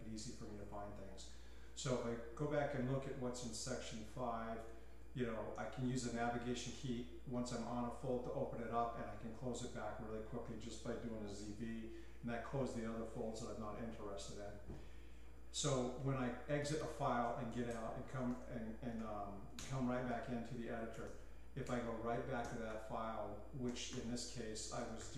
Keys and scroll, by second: 3.4-6.3 typing, 10.3 j, 11.0 z, 11.5 v, 16.4-19.4 typing, 19.5 Return, 20.5-25.1 typing, 24.6 Escape.